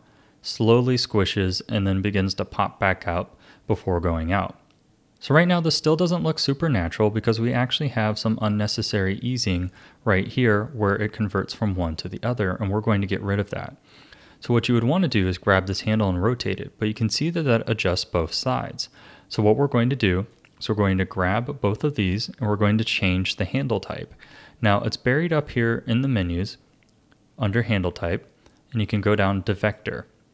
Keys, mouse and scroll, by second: 4.9 ctrl+z, 4.9 a, 5.2-9.7 drag, 15.1 click, 15.7 r, 20.3 click, 21.6 shift+click, 25.4-28.5 drag.